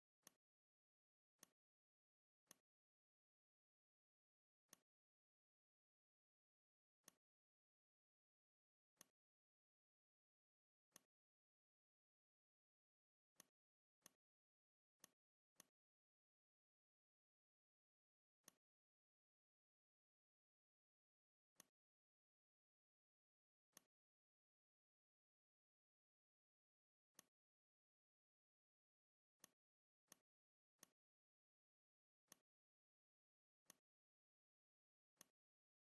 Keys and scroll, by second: 6.1 a, 8.1 v, 10.4 r, 12.3 v, 33.4 r, 34.6 v.